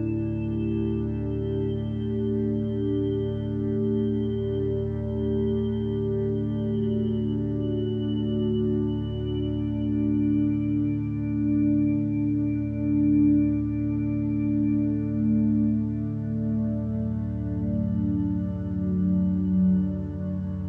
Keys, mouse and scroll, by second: 0.1 x, 0.8 x, 2.4 x, 3.6 x, 6.6 ctrl+space.